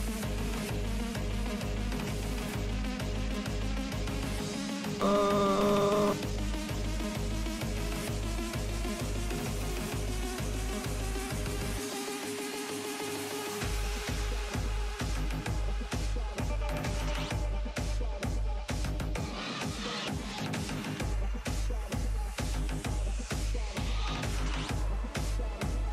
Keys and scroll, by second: 4.3 z, 10.7 s, 18.2 s, 18.6 s, 22.5 s, 23.1 s.